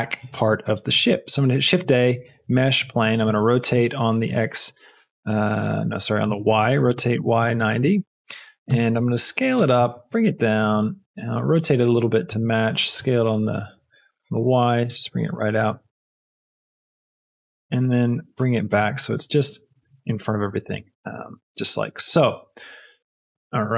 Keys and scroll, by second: 1.1 shift+a, 3.2 shift+r, 4.3 x, 6.2 Escape, 6.7 r, 7.1 y, 7.3 KP_9, 7.7 KP_0, 7.9 Return, 8.9 s, 9.7 g, 9.9 z, 11.1 r, 12.2 s, 12.9 x, 14.0 y, 16.5 r, 17.4 g, 17.6 x.